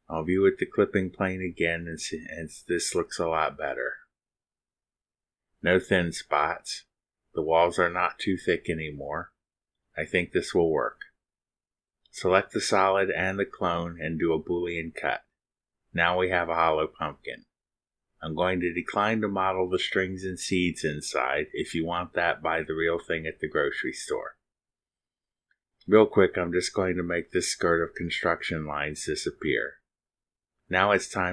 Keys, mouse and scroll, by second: 1.1 click, 2.1 click, 12.9 click, 15.5 click, 17.8 ctrl+click, 20.9 click, 26.3 click, 28.5 space, 30.8 click.